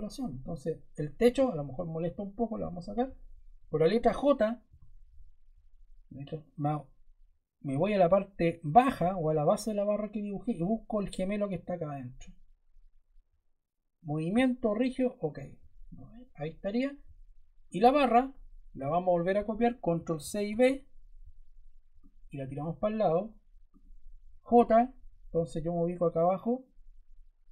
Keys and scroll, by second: 4.6 j, 19.9 super+Caps_Lock, 20.1 super+c, 20.4 super+v, 24.3 j.